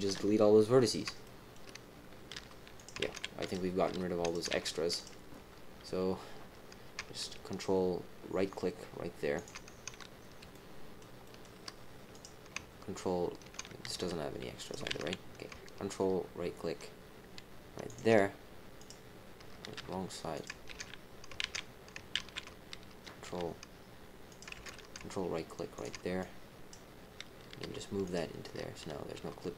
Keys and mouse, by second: 0.0 KP_1, 1.2 shift+click, 2.3 g, 3.0 ctrl+z, 3.4 click, 3.8 g, 4.5 ctrl+z, 4.9 click, 9.3 ctrl+click, 10.5 shift+click, 11.2 shift+click, 12.1 click, 13.9 g, 14.9 ctrl+z, 17.8 ctrl+click, 18.7 click, 19.7 g, 20.6 ctrl+z, 21.4 ctrl+z, 22.4 ctrl+z, 23.2 g, 24.5 ctrl+z, 26.2 click, 27.6 g, 29.1 g.